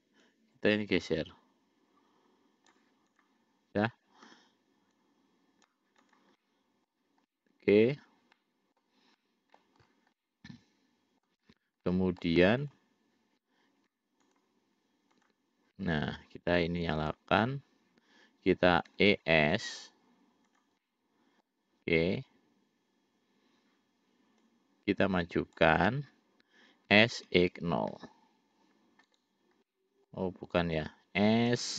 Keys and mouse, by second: 0.5-3.0 drag, 3.4 click, 4.5 l, 5.2 click, 6.3 click, 6.6 middle click, 7.5 middle click, 8.5 middle click, 9.4 middle click, 10.3-11.5 middle drag, 12.0 middle click, 12.8 click, 14.5 shift+click, 15.4 shift+click, 17.3 click, 19.1 e, 21.0 middle click, 24.7-25.9 drag, 27.1 s, 29.9 middle click.